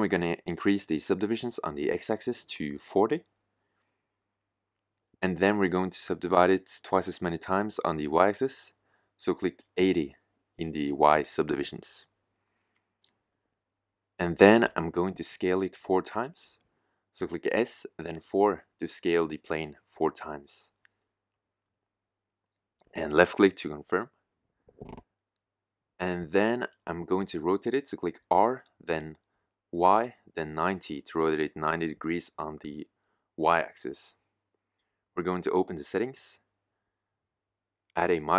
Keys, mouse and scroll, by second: 1.7-5.2 middle drag, 6.4-8.2 middle drag, 15.2-18.9 middle drag, 18.9 s, 29.1 r, 34.9-35.7 middle drag.